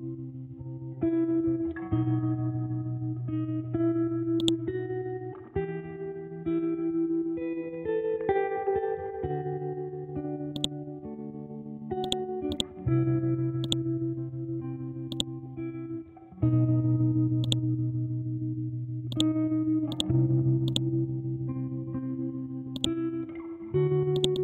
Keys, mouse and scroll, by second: 1.0 r, 1.9 ctrl+Home, 2.8 scroll down 1, 3.5-4.4 scroll up 1, 4.4-6.8 drag, 6.8 Up, 8.6 Down, 10.5 click, 10.9-11.4 scroll down 1, 11.4-12.0 scroll up 1, 12.0-22.7 drag.